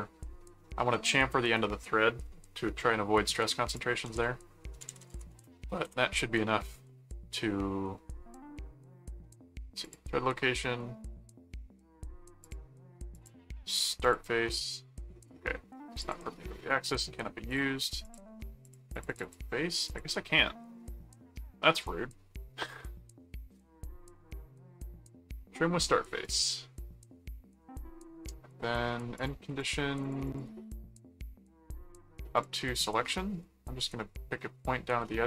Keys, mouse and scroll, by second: 3.7 click, 4.0-5.7 typing, 5.8 Return, 9.8 click, 12.4 click, 13.1 click, 14.0 click, 16.0 click, 16.9 click, 17.5-18.6 drag, 18.7-19.8 drag, 19.9 click, 26.2 click, 29.2-30.8 drag, 32.3 click, 35.0 middle click.